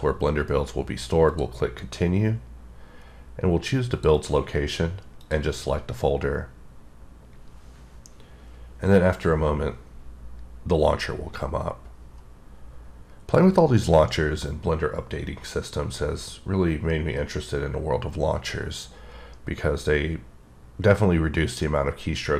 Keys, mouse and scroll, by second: 1.9 click, 3.9 click, 4.2 double click, 5.2 click.